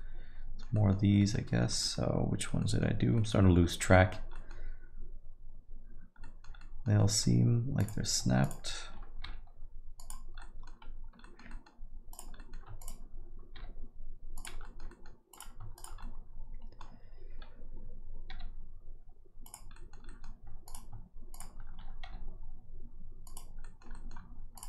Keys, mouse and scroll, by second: 0.7 middle click, 1.2 alt+middle click, 1.4 middle click, 1.7 middle click, 1.9 alt+middle click, 2.6 middle click, 2.9 scroll down 2, 3.1 middle click, 3.4 scroll up 2, 3.7 alt+middle click, 3.9 middle click, 4.3 middle click, 6.2 middle click, 6.6 alt+middle click, 7.0 middle click, 7.8 click, 8.4 shift+click, 9.2 g, 10.4 alt+middle click, 11.2 alt+middle click, 11.5 middle click, 12.1 click, 12.4 alt+middle click, 12.8 shift+click, 13.5 g, 14.6 alt+middle click, 14.9 middle click, 15.3 click, 15.7 shift+click, 16.0 alt+middle click, 18.3 g, 19.7 middle click, 20.0 alt+middle click, 20.6 click, 21.3 shift+click, 22.0 g, 23.6 middle click, 23.9 alt+middle click, 24.5 click.